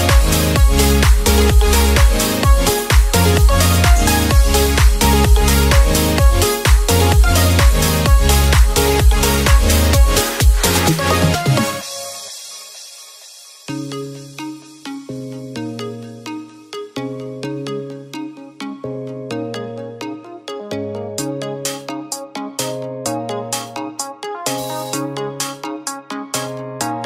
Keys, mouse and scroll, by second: 8.2 click, 12.3 click, 13.3 shift+d, 14.8 r, 16.5 click, 18.7 click, 21.2 shift+d, 22.2 r.